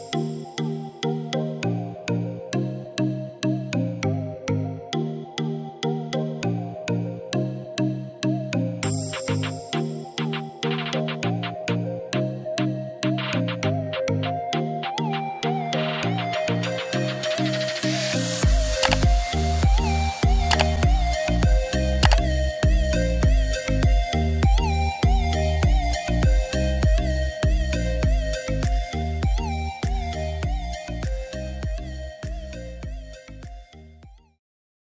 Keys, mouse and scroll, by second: 18.7 click, 25.6 ctrl+z, 29.4 click, 30.7 ctrl+z, 31.4 click.